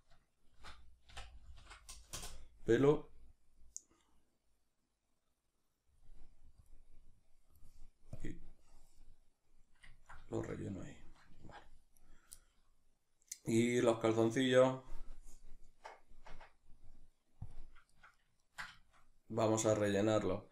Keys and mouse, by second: 2.2 Return, 9.1-12.0 middle drag, 11.6 Tab, 12.0 right click, 12.4-20.5 shift+middle drag, 17.6 Tab.